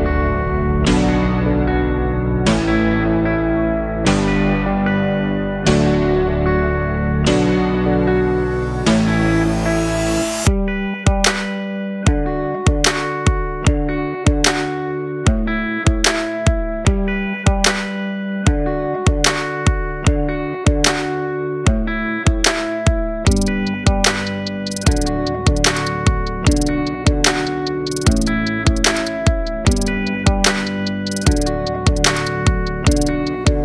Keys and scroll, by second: 0.9-3.3 typing, 10.0 r.